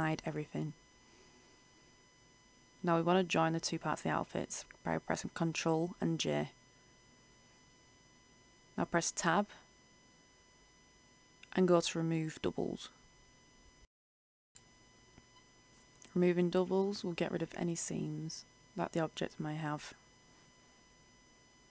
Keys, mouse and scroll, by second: 0.6 right click, 2.0-2.7 scroll up 1, 3.4 shift+right click, 5.8 ctrl+j, 7.7 Tab, 8.6-9.6 scroll down 1, 9.6-10.9 middle drag, 14.0 click, 18.4 Tab, 19.4 middle click, 20.8-21.7 scroll up 1.